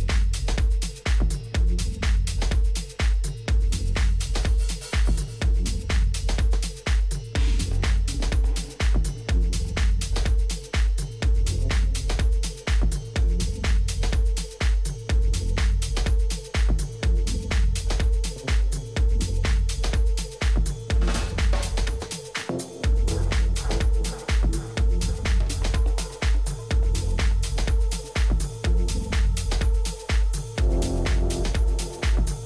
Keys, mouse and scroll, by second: 2.1 a, 2.4-4.8 middle drag, 7.9-9.9 middle drag, 21.3-24.0 middle drag.